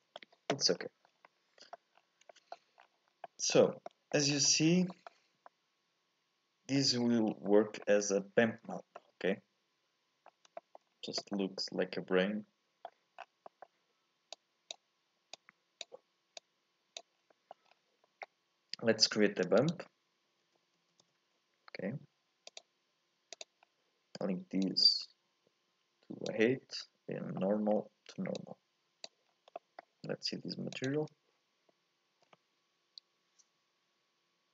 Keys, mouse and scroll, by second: 0.7 scroll down 1, 1.2 scroll up 1, 1.2 middle click, 1.9-2.3 scroll up 1, 2.3 shift+middle click, 2.8-3.2 scroll down 7, 3.2 middle click, 3.6 scroll up 3, 3.8 middle click, 4.3-4.9 scroll down 5, 4.9 middle click, 5.2 scroll up 1, 5.4-7.3 middle drag, 7.3 scroll down 1, 7.5-8.6 middle drag, 8.6-8.9 scroll down 2, 8.9-10.3 middle drag, 10.3 scroll up 1, 10.6 shift+middle click, 10.9-11.3 scroll down 1, 11.3-13.2 middle drag, 13.2 scroll down 1, 13.4 middle click, 14.3 click, 15.3 click, 16.4 click, 17.1-18.0 scroll up 5, 17.3 middle click, 18.0-19.2 middle drag, 19.2 shift+a, 23.6-24.6 scroll up 1, 24.6 click, 27.4 middle click, 28.3 click, 29.3 scroll down 2, 29.5 middle click, 30.0 scroll down 2, 30.8 ctrl+shift+click.